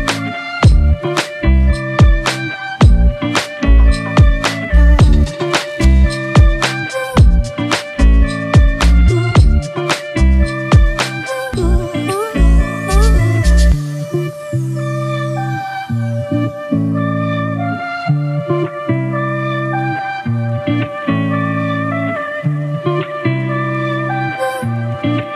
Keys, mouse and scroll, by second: 2.4 Return, 12.0 shift+click, 13.4 shift+click, 14.6 shift+click, 15.9 shift+click, 22.5 ctrl+t.